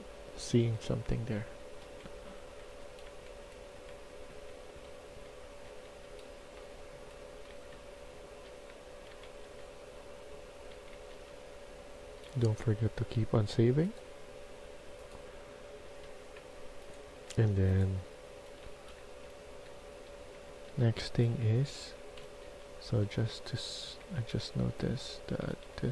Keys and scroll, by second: 1.1-12.2 typing, 15.8 F1, 17.0 s, 18.5-22.6 typing, 23.6-24.0 typing, 25.2-25.9 typing.